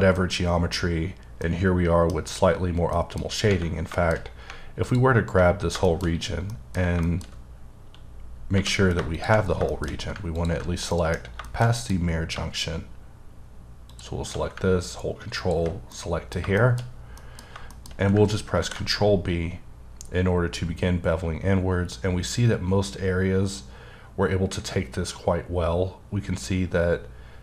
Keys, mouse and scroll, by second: 0.2 middle click, 0.8-1.4 scroll up 1, 1.4 middle click, 2.5 scroll down 1, 2.9 middle click, 3.3 scroll up 1, 3.9 shift+middle click, 4.1-4.8 shift+scroll up 2, 4.8 alt+click, 5.6 scroll down 2, 5.8 shift+middle click, 6.1-6.5 scroll up 1, 6.5 middle click, 7.3 scroll up 1, 7.7-8.1 scroll down 1, 8.5 2, 9.1 shift+click, 9.4 scroll down 1, 9.7 shift+middle click, 10.0 scroll up 1, 10.3 ctrl+click, 10.7 scroll down 1, 10.9 middle click, 12.0-12.3 scroll up 2, 13.9 shift+click, 15.9 middle click, 17.4-17.7 scroll up 1, 17.7 shift+middle click, 17.9-18.6 shift+scroll up 2, 18.6 ctrl+b, 19.6-21.3 scroll down 8, 21.3-21.8 scroll down 1, 22.0-22.7 scroll up 1.